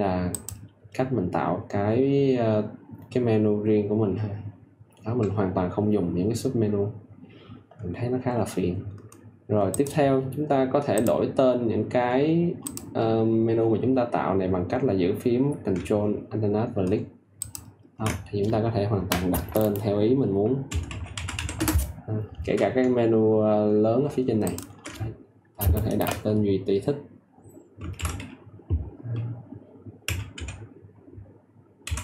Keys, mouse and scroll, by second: 17.3 ctrl+alt+click, 20.4-21.8 typing, 24.4 ctrl+alt+click, 27.9 shift+t, 30.0 e, 31.5-32.0 typing.